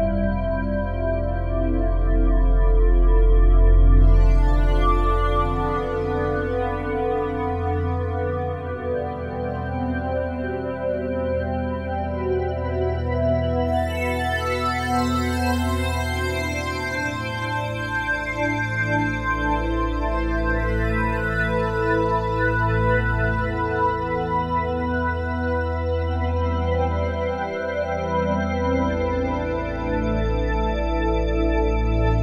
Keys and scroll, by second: 0.1-2.3 typing.